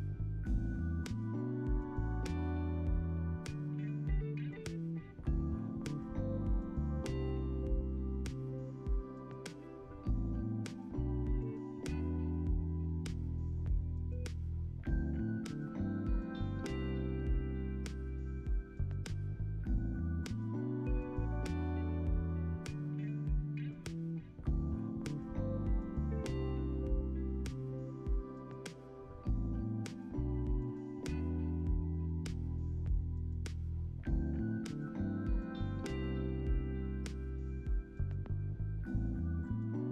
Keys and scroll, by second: 1.1 r, 2.6 alt+x, 3.8 x, 6.7-8.4 typing, 8.6 Return, 12.6-14.9 typing, 18.2 space, 22.9 alt+x, 24.3 alt+z, 28.7 alt+z, 29.7 x, 30.2 alt+z, 32.0 ctrl+s, 32.5 alt+x, 33.7 =.